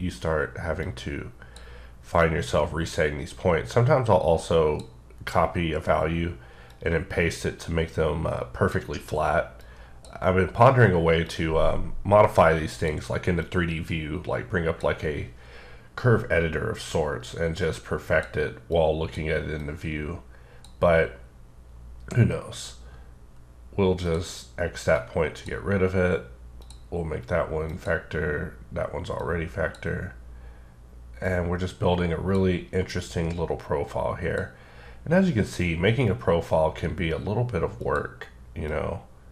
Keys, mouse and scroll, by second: 0.8 click, 2.2 click, 6.7 click, 9.6 click, 11.2 click, 13.4 click, 16.9 click, 18.7 click, 19.6 click, 24.0 click, 24.9 click, 26.6 click, 27.7 click, 29.2 click, 31.2 click, 32.9 click, 37.8 click, 39.0 click.